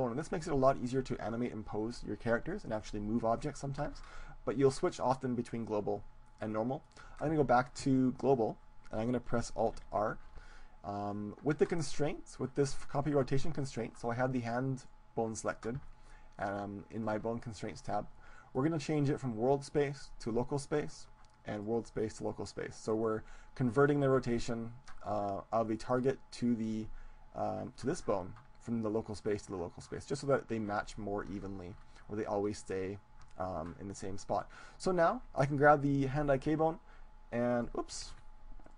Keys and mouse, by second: 4.9-6.9 drag, 9.7 alt+r, 11.1-12.7 middle drag, 12.7 right click, 14.9-16.6 right drag, 16.9-20.5 drag, 21.5-23.5 drag, 31.3-33.9 middle drag, 34.6-36.7 right drag, 36.7 g, 38.5 ctrl+z, 38.5 click.